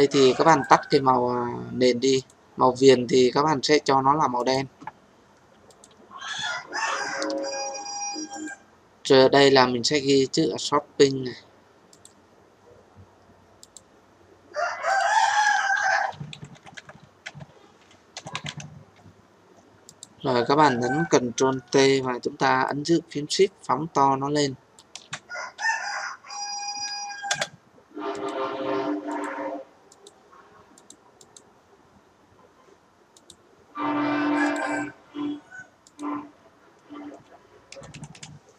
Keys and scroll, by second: 21.5 ctrl+t, 27.2 Return.